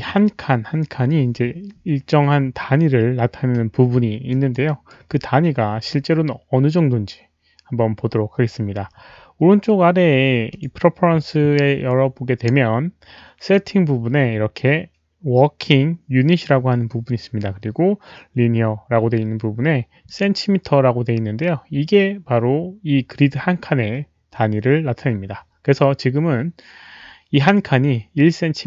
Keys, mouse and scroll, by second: 4.3 alt+click, 4.6 alt+right click, 10.5 click, 10.6 alt+right click, 13.5 alt+click, 20.0 click, 26.6 click.